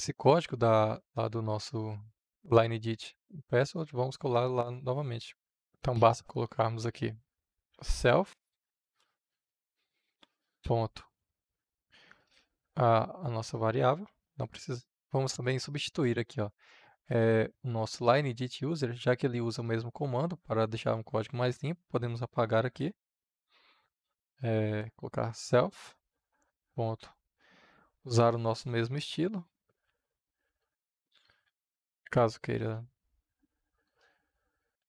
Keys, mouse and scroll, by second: 5.6-7.5 drag, 7.5 s, 7.9 l, 9.3 Return, 10.6 >, 11.5 ctrl+v, 13.9 click, 16.9-23.8 drag, 24.4-26.4 typing, 26.9 ctrl+v, 30.3-32.6 drag, 32.6 Return, 33.6 click, 33.9 Return.